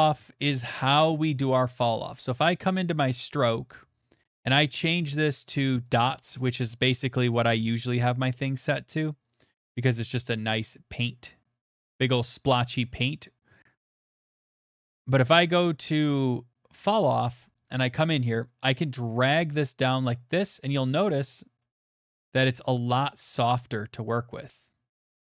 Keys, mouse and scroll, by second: 1.3-2.1 scroll, 2.2 click, 3.2 middle click, 3.3 click, 3.7 middle click, 3.7 middle click, 3.8 middle click, 4.4 click, 5.9 click, 8.5 click, 9.5 middle click, 10.4 click, 11.7 click, 16.8 click, 17.3 scroll, 18.7 middle click, 19.8 click, 20.8 middle click, 21.6 click, 22.3 middle click, 22.6 middle click, 23.3 click, 23.3 middle click, 24.1 click, 24.1 middle click, 25.0 click.